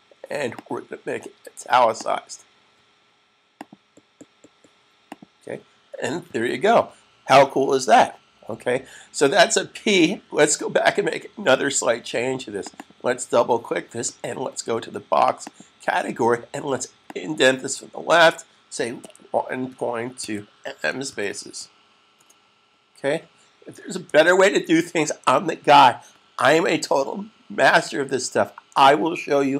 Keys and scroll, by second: 3.7 super+s, 18.9-21.6 typing, 24.1 s.